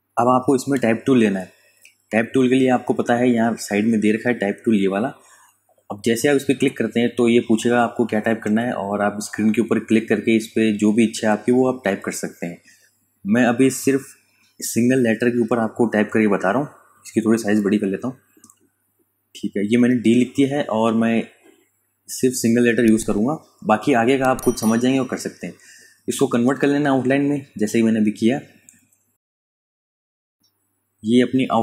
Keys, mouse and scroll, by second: 0.1 space, 0.3 click, 0.7 space, 1.4 click, 1.8 space, 5.5 ctrl+Num_Lock, 6.0 KP_Add, 7.9 KP_Subtract, 12.4 click, 14.6 shift+d, 17.1 click, 20.6 alt+shift+click, 25.7 right click, 27.0 super+KP_Add, 28.8 KP_Subtract.